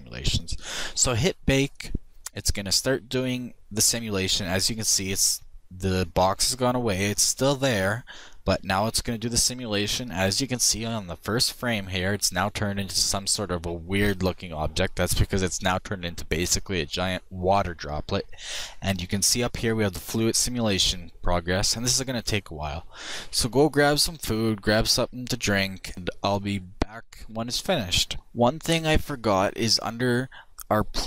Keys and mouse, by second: 0.6-3.0 drag, 29.3-31.0 drag.